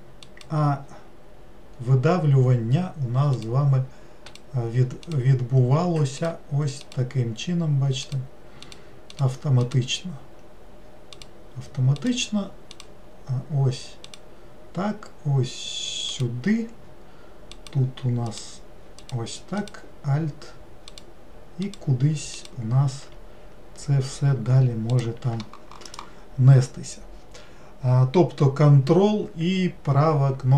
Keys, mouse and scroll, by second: 0.2 ctrl+right click, 3.4 ctrl+right click, 4.3 ctrl+right click, 5.1 ctrl+right click, 6.2 ctrl+right click, 6.8 ctrl+right click, 8.1 ctrl+right click, 8.6 ctrl+right click, 9.2 ctrl+right click, 9.6 ctrl+right click, 11.2 ctrl+right click, 12.0 ctrl+Right, 12.0 right click, 12.7 ctrl+Right, 12.7 right click, 14.1 ctrl+Right, 14.1 right click, 16.1 ctrl+Right, 16.1 right click, 17.5 ctrl+Right, 17.5 right click, 18.3 ctrl+Right, 18.3 right click, 19.0 ctrl+Right, 19.0 right click, 19.6 ctrl+Right, 19.6 right click, 20.9 ctrl+right click, 21.7 ctrl+right click, 22.4 ctrl+right click, 23.5-24.8 scroll down 2, 24.9 ctrl+right click.